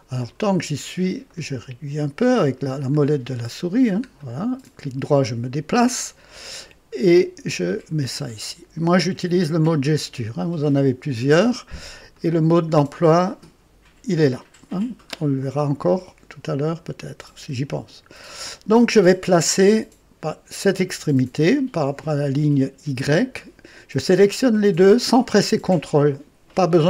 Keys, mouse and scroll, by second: 1.2-2.4 right drag, 2.5-2.8 scroll down 1, 2.9-3.3 scroll up 1, 3.4-3.9 scroll down 2, 4.1-5.5 right drag, 6.9-8.5 drag, 10.3 click, 12.0 click, 14.9 typing, 15.3 click, 16.7-18.2 drag, 20.5 click, 23.0 click.